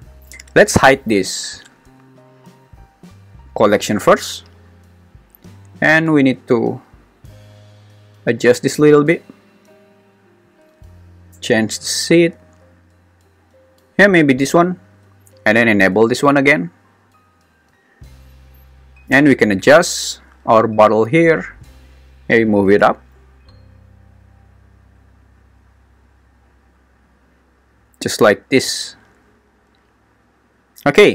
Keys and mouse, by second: 10.5 click, 12.5 click, 17.7 click, 20.8 click, 22.4 g, 22.8 z.